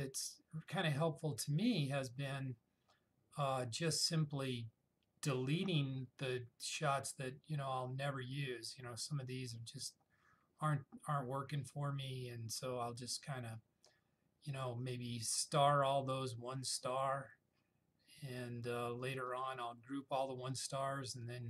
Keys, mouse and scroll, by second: 4.2 scroll down 1, 6.8 scroll up 1, 12.3-13.9 scroll up 1, 15.7-16.1 scroll down 1, 17.0 click, 19.4 click.